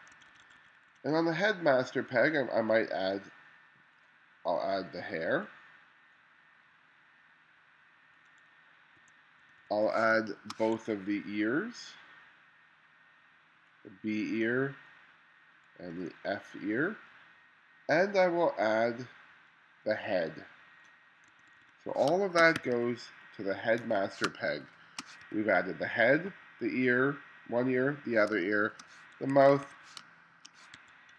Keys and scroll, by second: 0.2 1, 9.1 2, 10.2 space, 10.8 1, 21.4 2, 22.1 space, 22.6 2, 23.8 1, 24.3 space, 25.3 2, 28.4-31.1 typing.